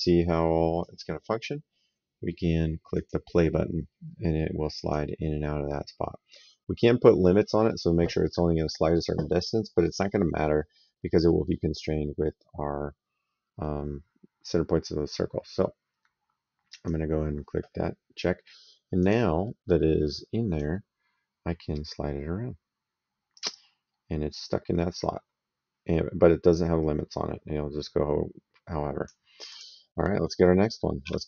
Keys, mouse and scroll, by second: 2.8 click, 4.6 click, 11.1 middle click, 16.5 click, 18.8 click, 20.4 click, 29.3 click, 31.1 s.